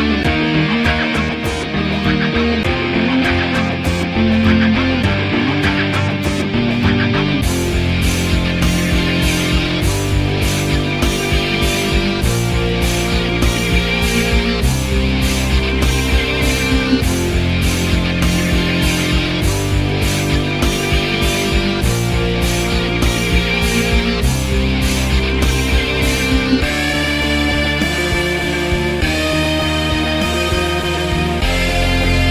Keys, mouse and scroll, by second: 0.6 alt+middle click, 0.8-2.0 alt+drag, 2.0 alt+middle click, 2.2 f, 2.4 f, 2.5-7.9 drag, 7.9 alt+middle click, 8.2-9.7 typing, 8.5 click, 9.3 click, 9.9 click, 10.6 alt+middle click, 10.9 p, 11.2-13.5 drag, 13.5 alt+middle click, 13.7 click, 14.3 alt+middle click, 14.5-15.6 drag, 15.6 ctrl+z, 15.6 ctrl+z, 15.8-19.3 shift+drag, 19.3 alt+middle click, 19.4 alt+click, 20.3 alt+middle click, 20.4 alt+right click, 20.5 alt+click, 20.7 alt+middle click, 20.8 alt+click, 21.4 alt+right click, 21.5 alt+click, 21.6 alt+middle click, 21.8-23.6 drag, 23.6 alt+right click, 23.7 alt+click, 23.9 right click, 24.5 f, 24.7-26.3 drag, 26.3 alt+right click, 26.5 alt+middle click, 26.6 alt+click, 27.3 alt+middle click, 27.4 alt+click, 27.7 alt+middle click, 27.8 alt+right click, 27.8 alt+click, 27.9 f, 28.3-29.7 drag, 29.7 alt+middle click, 29.8 alt+click, 29.9 alt+right click, 30.1 click, 30.6 alt+right click, 30.8 shift+click, 31.1 alt+middle click, 31.6 f, 31.7 click.